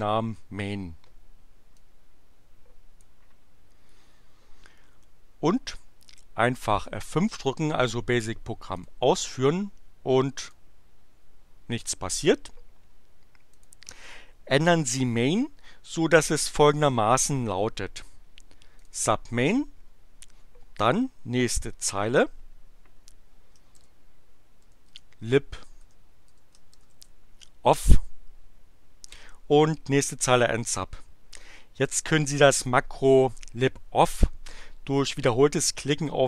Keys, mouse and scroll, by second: 1.7-3.2 drag, 8.7 click, 10.4 click, 13.5 click, 18.7 click, 19.8 Tab, 23.8-27.4 typing.